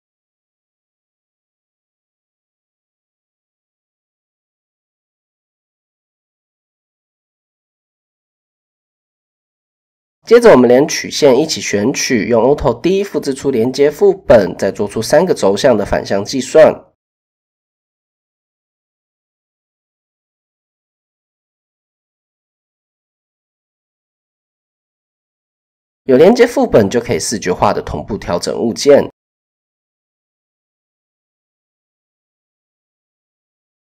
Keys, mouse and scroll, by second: 0.6 middle click, 1.2 middle click, 3.7 click, 4.6 click, 5.2 click, 7.4-8.1 drag, 11.2 alt+d, 13.1 s, 14.6 s, 17.5 s, 22.3 click, 23.0 Tab, 23.6 Tab, 24.9 Tab, 25.3 a, 28.1-33.5 drag.